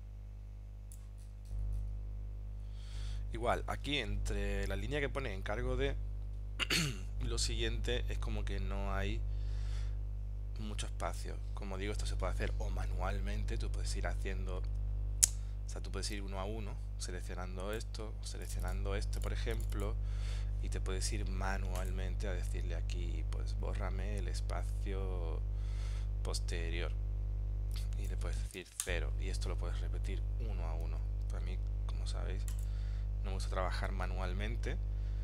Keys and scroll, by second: 14.8 super+Tab, 31.4 super+z.